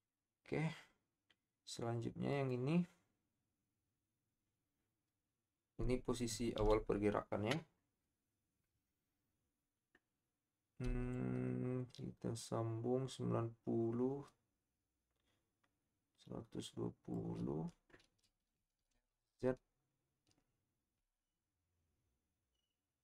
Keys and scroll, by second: 18.8 r, 18.9 z.